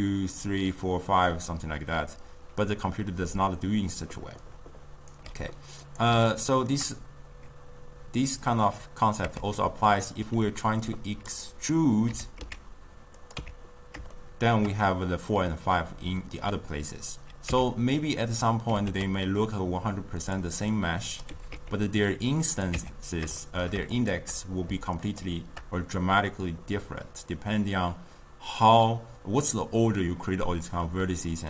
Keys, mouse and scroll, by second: 3.5-5.2 right drag, 5.2 d, 6.0 click, 6.5-9.3 shift+middle drag, 9.3 Tab, 11.4 click, 12.2 e, 13.5 Tab, 14.3-17.6 shift+middle drag, 17.6 Tab, 18.5 click, 18.8 g, 21.3 click, 21.5 g, 22.8 Tab, 23.6-25.3 shift+middle drag, 25.3 shift+click.